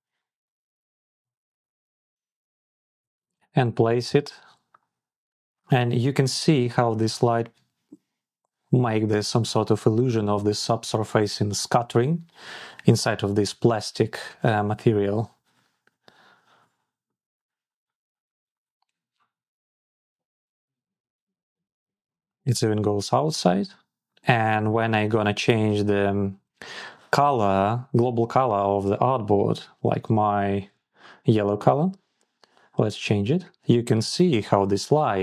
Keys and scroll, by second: 2.8 Return.